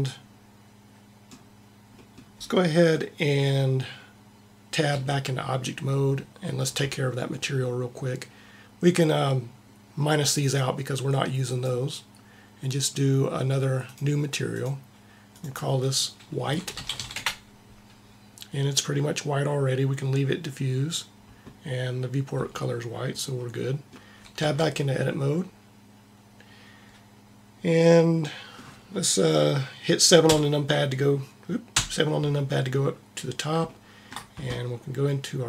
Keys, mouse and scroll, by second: 1.9 middle click, 4.9 Tab, 10.3 click, 24.4 Tab, 30.3 KP_7, 30.3 KP_8, 31.7 KP_7.